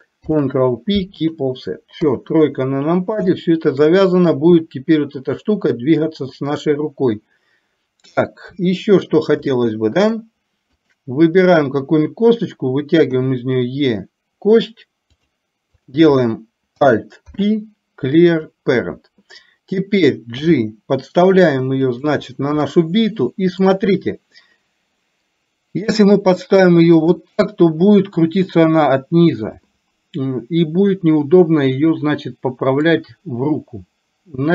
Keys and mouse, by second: 0.3 ctrl+p, 2.1 KP_3, 3.4 shift+middle click, 8.6 KP_1, 9.7 shift+middle click, 13.3 e, 17.3 alt+p, 20.4 g, 22.8-23.8 shift+middle drag, 26.1-27.3 drag, 32.9-34.5 drag.